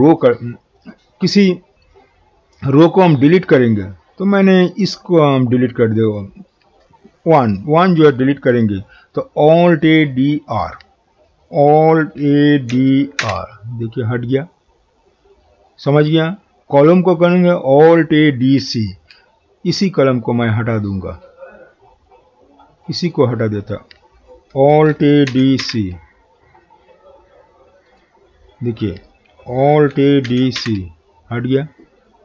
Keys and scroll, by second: 12.2 alt+a, 12.7 alt+d, 13.2 typing, 24.5 alt+d, 24.9 alt+a, 25.3-25.6 typing, 29.9 alt+a.